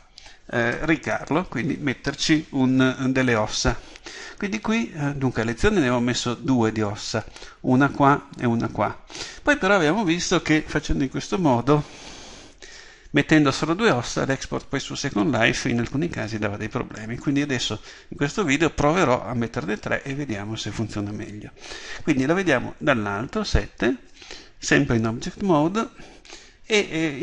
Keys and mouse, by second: 22.8 KP_7.